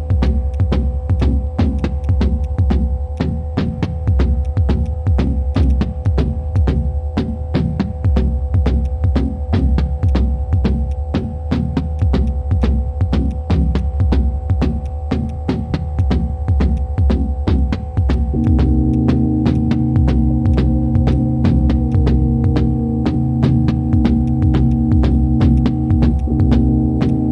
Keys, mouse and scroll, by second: 5.6 double click, 7.7 typing, 9.4 typing.